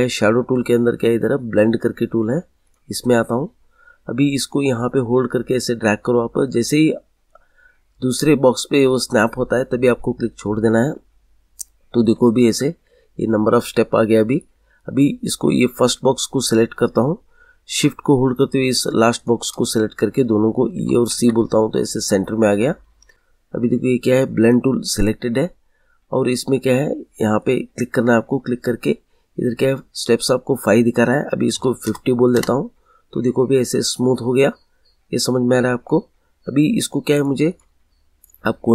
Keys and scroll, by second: 20.7 e, 21.1 c, 31.5 5, 31.8 0, 32.3 Return.